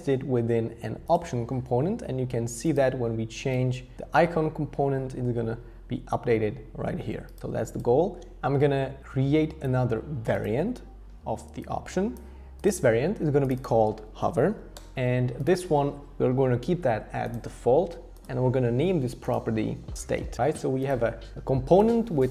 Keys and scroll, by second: 14.0-15.1 typing, 19.8-20.8 typing.